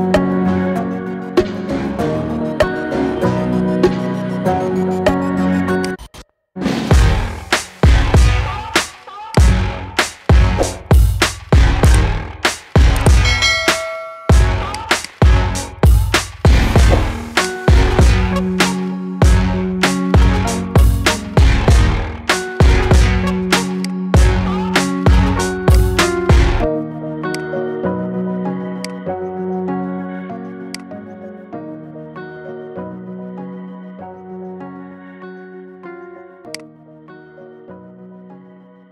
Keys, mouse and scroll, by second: 0.3-1.2 shift+middle drag, 1.2 g, 6.5 shift+d, 9.6-10.3 scroll down 11, 10.3-11.6 scroll up 8, 11.7 shift+d, 14.8 click, 15.2-15.8 scroll down 11, 15.8-17.2 middle drag, 17.2 click, 17.5-17.9 scroll up 4, 17.9-18.3 middle drag, 18.3-18.8 scroll down 4, 18.8-20.3 middle drag, 20.3 scroll up 9, 20.6-21.7 middle drag, 21.7 KP_1, 22.2-23.6 scroll up 5, 23.6 click, 24.7 ctrl+2, 25.6 click, 26.5 ctrl+2, 27.1 click, 28.1 ctrl+2, 28.7 click, 29.6 ctrl+2, 30.6 click, 31.2 scroll up 1, 31.5-32.7 shift+middle drag, 32.7-33.6 scroll down 8, 33.6-35.1 middle drag, 35.1 KP_1, 35.6-36.3 scroll up 4, 36.3 click, 37.2-38.9 scroll up 3.